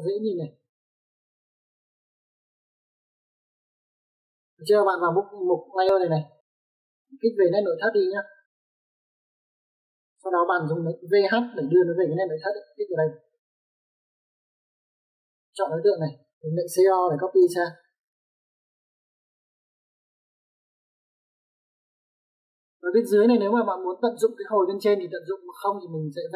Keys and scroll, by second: 9.6 Escape, 11.9 typing, 14.5 space, 15.5 Escape, 17.6 c, 17.9 o, 18.2 space, 23.3 space.